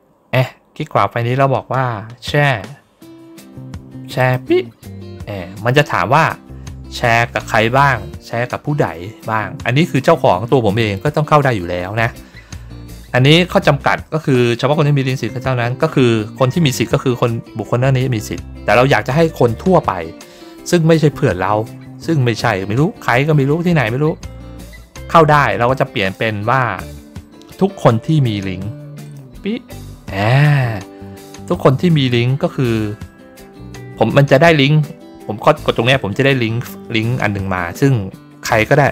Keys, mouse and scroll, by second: 4.1 click, 25.9 click, 28.9 click.